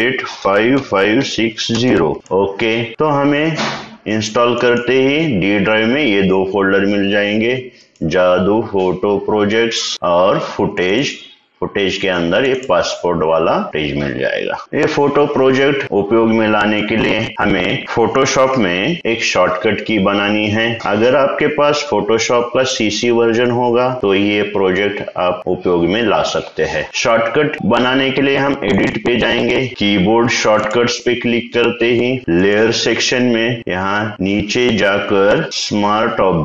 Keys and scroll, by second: 0.0-2.1 typing.